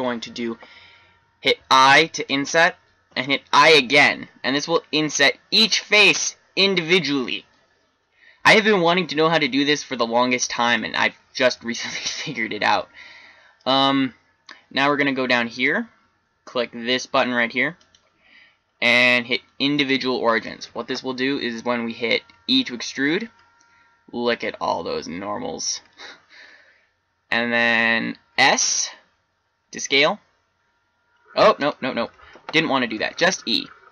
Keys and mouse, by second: 1.6 i, 11.4-13.3 middle drag, 17.7-22.3 drag, 22.3 e, 32.2 ctrl+z, 33.0 e.